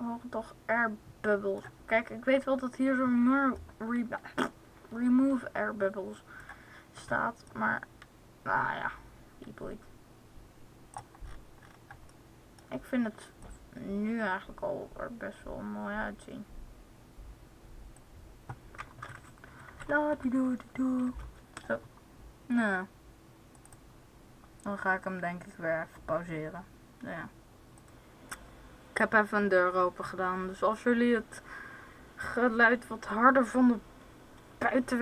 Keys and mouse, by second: 7.4-9.2 drag, 13.5-15.2 drag, 19.0 Right, 19.1-20.0 Right, 20.3 Right, 21.0 Left.